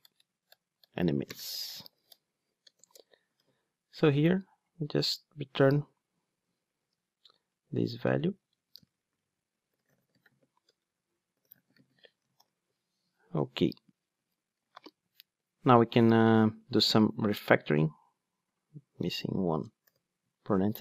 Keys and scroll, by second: 3.4 super+v, 7.4 Return, 12.4 alt+super+l.